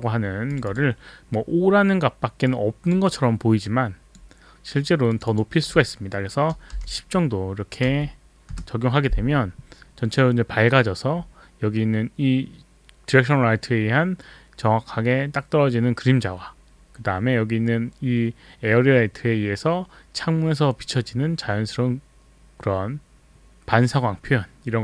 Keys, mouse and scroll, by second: 0.4 click, 0.7 click, 2.4 click, 3.1 click, 3.2 click, 5.0 click, 5.3 click, 6.7 Delete, 7.9 KP_1, 8.5 Return.